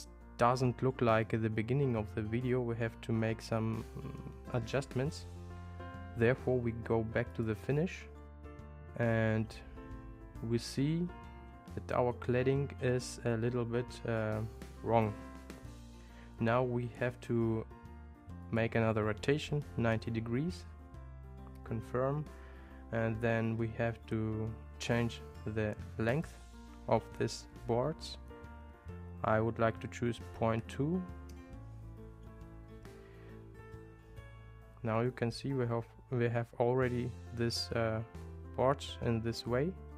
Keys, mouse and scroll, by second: 7.4 click, 18.5-21.2 drag, 26.2-32.7 drag.